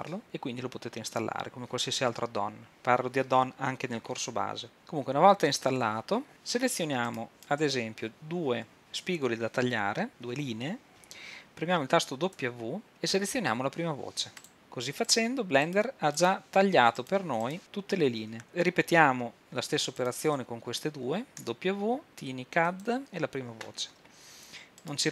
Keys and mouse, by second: 7.1-8.8 right drag, 12.4 w, 15.0-17.7 drag, 21.4 w.